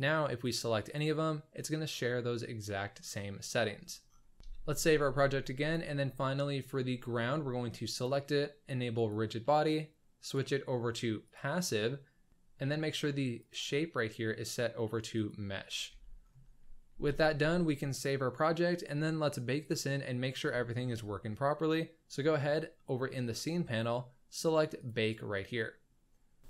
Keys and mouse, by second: 4.5 ctrl+s, 5.6 click, 9.0 click, 10.2-11.5 drag, 13.4-15.4 drag, 15.8 z, 17.0 ctrl+s, 19.6 click, 24.7-26.2 drag, 26.2 click.